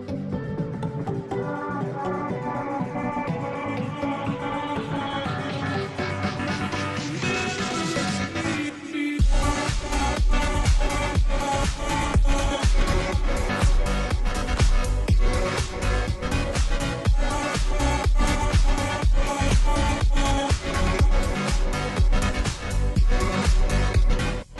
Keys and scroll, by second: 0.0-24.5 typing.